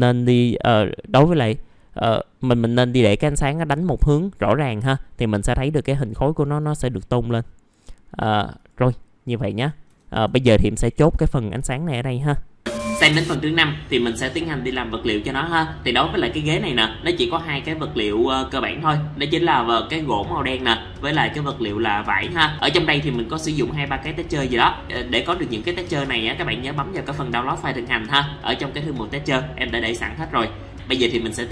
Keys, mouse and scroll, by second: 1.1 click, 2.9 middle click, 4.9-5.2 scroll down 1, 7.2-7.5 scroll up 1, 8.8 click, 12.1 KP_0.